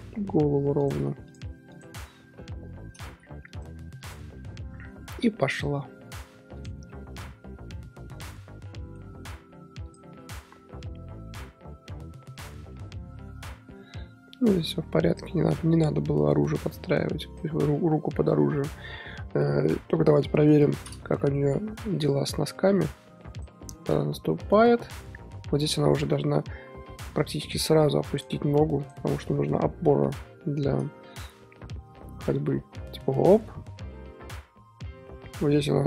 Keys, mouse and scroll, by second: 0.1 r, 1.2 shift+click, 1.7 shift+click, 2.5 i, 3.4-5.0 drag, 5.0 scroll down 1, 5.2-6.5 middle drag, 6.5 click, 6.9-7.2 middle drag, 7.2 z, 7.7-9.0 middle drag, 9.0-9.8 scroll up 3, 9.8 click, 10.5 scroll up 1, 10.8-14.4 drag, 15.5 scroll down 3, 15.5-16.3 middle drag, 16.3-18.3 drag, 18.3 scroll down 4, 18.5-20.3 middle drag, 20.3 KP_3, 21.2 shift+middle drag, 21.4-21.8 scroll up 3, 21.8-22.7 shift+middle drag, 22.7-28.3 drag, 28.8 click, 29.1 r, 31.5 i, 32.3-35.8 drag.